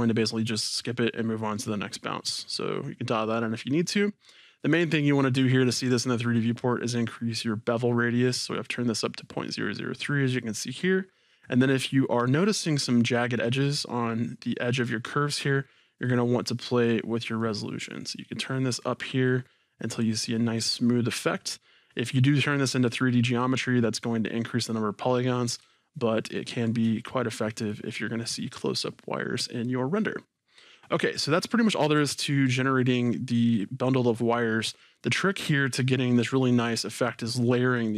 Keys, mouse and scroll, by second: 12.2 scroll, 13.3-17.4 middle drag, 17.4-25.7 drag, 21.3-23.6 scroll, 25.7-31.6 shift+middle drag, 31.6 click.